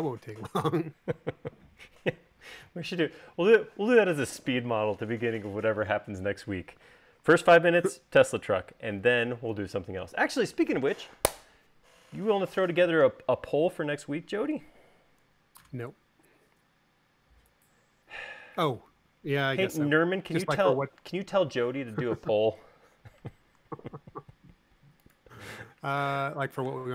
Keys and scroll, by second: 26.7 m.